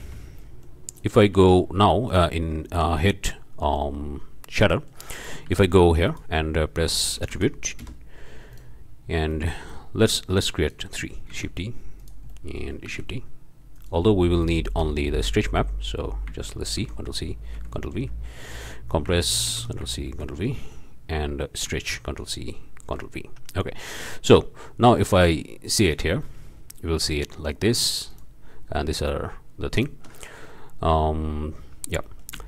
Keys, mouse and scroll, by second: 0.4-1.2 shift+drag, 1.3 shift+a, 2.1-2.4 drag, 3.0-4.1 drag, 4.7-5.1 drag, 5.3 shift+click, 5.5 shift+a, 6.1 shift+click, 6.8 a, 7.2 t, 7.3 r, 7.8 Return, 8.5 drag, 8.8-9.3 scroll up 2, 9.4 click, 9.8 scroll up 2, 10.1-10.4 drag, 10.4-10.9 scroll up 2, 11.3 shift+d, 12.0 drag, 12.3 click, 12.8 shift+d, 13.7 click, 14.4 click, 15.1 click, 16.8 ctrl+c, 17.5 ctrl+v, 19.5 ctrl+c, 20.1 ctrl+v, 20.5 ctrl+click, 22.1 ctrl+c, 22.8 ctrl+v, 23.6-24.0 drag, 25.2 ctrl+shift+click, 26.2-27.7 ctrl+shift+drag, 28.1 ctrl+shift+click, 29.7-30.1 ctrl+shift+drag, 31.8 drag, 32.3 ctrl+click.